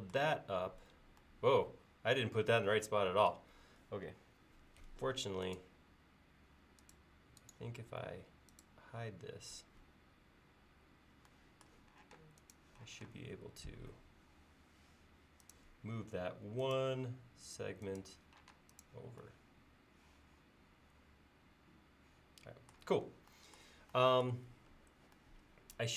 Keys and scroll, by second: 9.9 l, 12.2 space, 18.6 space.